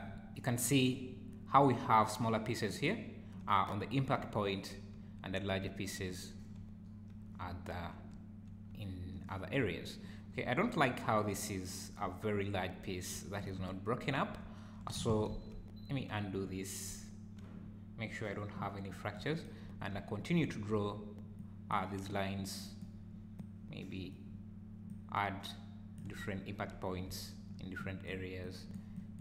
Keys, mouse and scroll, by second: 0.2 `, 3.6-10.3 typing, 6.3-6.6 scroll down 2, 12.1 `, 13.1 `, 14.4 `, 15.5 ctrl+z, 17.0 `, 19.6 `, 20.4 `, 21.4 click, 22.1 click, 23.4 click, 24.9 click, 26.2 `, 27.1 `, 27.8 click, 28.4 click, 29.0 click.